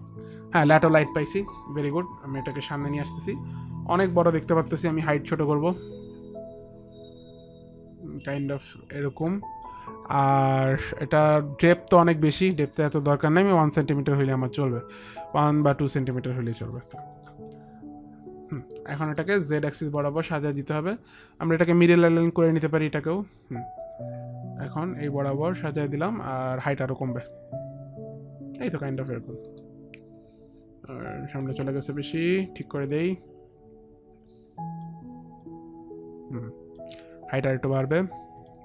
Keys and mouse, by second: 0.9 click, 3.1 click, 5.9 click, 12.4 click, 13.7 KP_1, 14.2 Return, 16.1 click, 16.8 Return, 16.8 KP_1, 16.9 KP_2, 17.3 Return, 18.7 middle click, 19.2 middle click, 21.1 Return, 21.1 middle click, 21.9 click, 21.9 middle click, 23.4 click, 24.1 click, 27.6 click, 29.1 middle click, 29.1 click, 29.6 middle click, 33.0 click, 33.0 alt+middle click, 35.6 click, 35.9 click, 38.5 click.